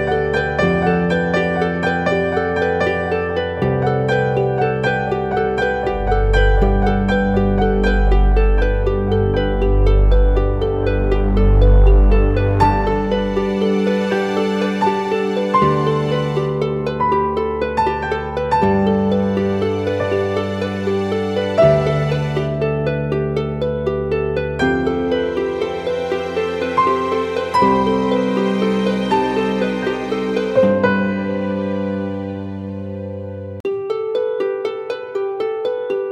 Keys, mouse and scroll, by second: 3.9 double click, 16.0 double click.